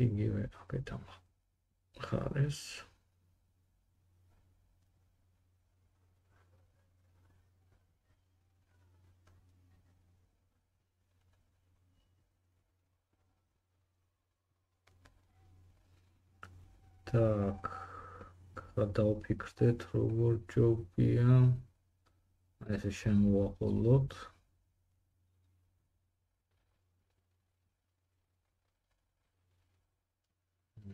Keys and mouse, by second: 1.2-1.7 drag, 4.0 middle click, 5.3-7.2 drag, 5.3 g, 7.2 middle click, 7.4 drag, 7.5 g, 9.3 middle click, 9.4-19.6 drag, 9.5 g, 19.6 middle click, 19.7-22.2 drag, 19.9 g, 22.2 middle click, 22.3-24.8 drag, 22.4 g, 24.6 middle click, 24.6 right click, 24.9 g, 28.6 g, 30.5 click, 30.5 middle click, 30.5 right click, 30.8 g.